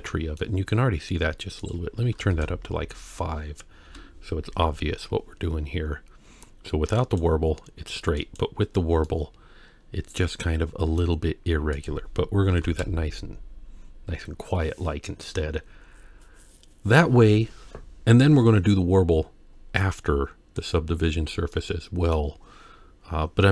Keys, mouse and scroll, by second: 1.6 click, 3.8 KP_1, 7.0 click, 8.2 click, 9.1-11.0 middle drag, 11.8 click, 19.7-20.6 scroll down 1, 20.6 click, 21.6-22.1 middle drag.